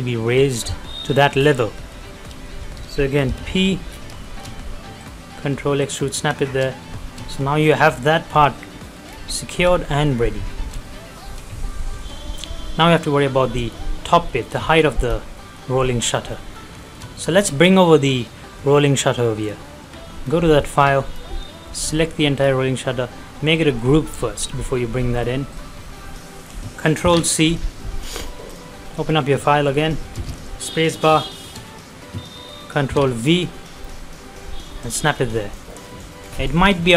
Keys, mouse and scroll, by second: 1.4-1.8 scroll down 2, 2.1 shift+middle click, 3.1 middle click, 3.2 p, 3.9 scroll down 1, 4.3 shift+middle click, 4.9 click, 6.8 middle click, 9.1 scroll down 1, 9.3 middle click, 9.4 middle click, 10.5 shift+middle click, 11.5-14.2 shift+middle drag, 14.2 middle click, 15.0 scroll up 1, 15.2 middle click, 15.9 scroll down 1, 16.2 middle click, 16.4 middle click, 16.8 shift+middle click, 17.0-17.7 shift+scroll down 1, 19.4 click, 20.2 scroll down 1, 20.7 click, 21.6 middle click, 22.4 right click, 23.9 click, 26.9 ctrl+c, 28.5 click, 29.0 middle click, 30.2 space, 31.2 shift+middle click, 32.9 ctrl+v, 34.8 click, 35.1 scroll down 1, 35.4 middle click, 36.0-36.3 scroll up 1, 36.5 middle click.